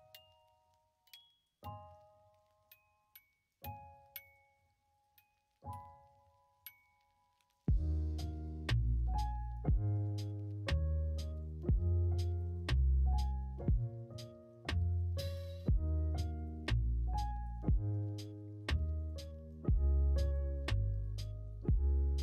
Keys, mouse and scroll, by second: 0.3 middle click, 0.9 middle click, 1.9 Tab, 2.3 click, 4.5 middle click, 6.5-7.6 drag, 8.7 click, 11.3-12.5 drag, 13.7 click, 14.9 click, 16.7 click, 18.9 click, 21.0 middle click, 21.3 Tab.